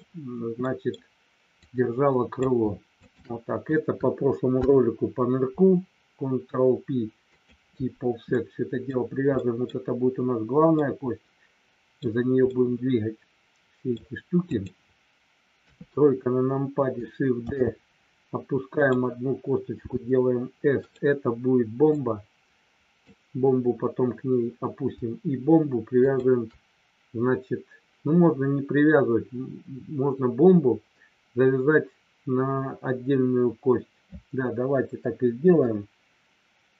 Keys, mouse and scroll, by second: 0.6 middle click, 0.6 scroll up 1, 0.8 scroll down 1, 1.6 click, 2.9 shift+click, 4.6 ctrl+p, 8.3 middle click, 9.4 middle click, 10.8-11.9 middle drag, 12.4-13.9 middle drag, 15.6 KP_3, 17.4 shift+d, 18.7 click, 20.8 click, 22.0-23.0 drag, 25.9 shift+click, 35.4 Delete.